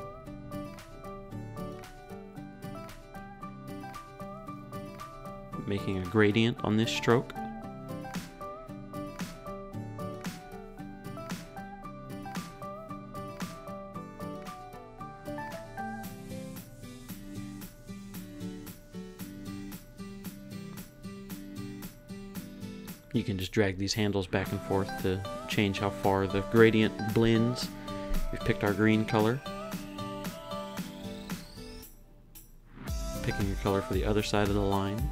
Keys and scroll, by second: 3.1 Up.